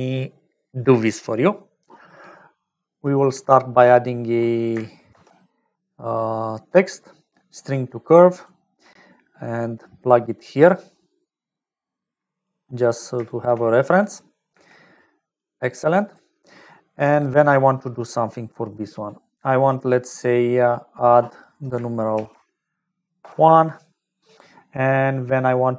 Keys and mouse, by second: 2.6 click, 3.3 click, 4.1 click, 7.7 shift+a, 9.1 click, 10.4-12.9 drag, 13.2 shift+click, 14.0 click, 14.4 g, 15.7 click, 17.8 click, 18.4 middle click, 20.6-24.1 drag.